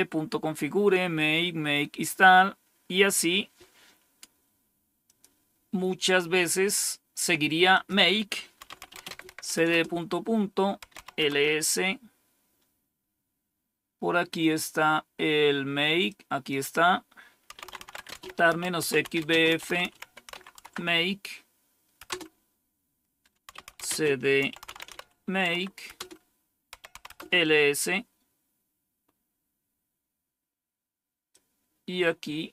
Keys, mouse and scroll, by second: 4.9 click, 7.6 click, 8.3-11.4 typing, 15.9 click, 17.2-20.7 typing, 21.9 typing, 23.2-27.4 typing, 30.2-31.2 scroll down 1, 31.2-32.5 drag.